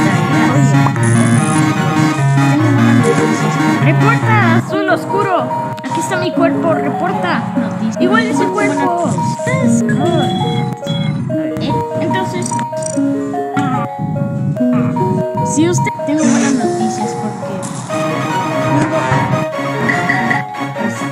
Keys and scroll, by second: 19.3 space, 19.7 space, 20.3 space.